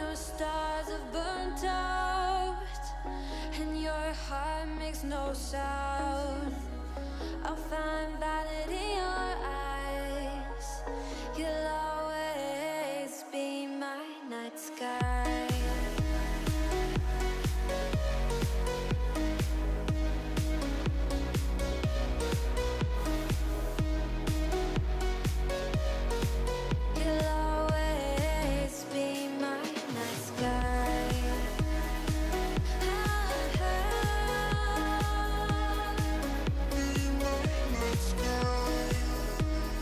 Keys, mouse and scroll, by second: 0.5 click, 0.8-2.3 drag, 2.5-3.9 drag, 4.7-7.5 drag, 9.3-10.8 drag, 11.4-14.8 drag, 14.8-16.2 middle drag, 17.7 click, 18.5 click, 20.3 shift+middle click, 21.3-23.0 drag, 23.2 middle click, 24.1-24.9 scroll down 1, 24.9-26.8 middle drag, 26.8-27.3 scroll up 3, 27.3-28.1 middle drag, 28.1 scroll down 1, 28.3 shift+middle drag, 28.5 click, 28.7 middle click, 29.3 KP_1, 29.6 click, 29.8 Tab, 29.9 click, 30.0 shift+middle click, 30.3 shift+a, 32.2 KP_3, 32.8 Tab, 33.0 a, 33.4 s, 34.6 g, 35.4 shift+middle click, 35.6 scroll up 3, 35.8 s, 37.7 middle click, 37.9 scroll up 4, 38.1 middle click, 38.6-39.1 scroll up 2, 39.1 s.